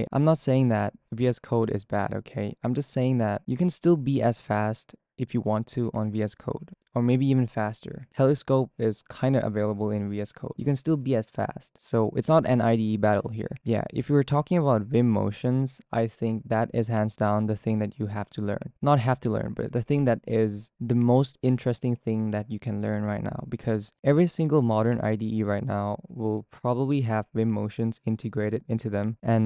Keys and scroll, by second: 4.0-16.1 typing, 17.2-21.9 typing, 24.9-29.4 typing.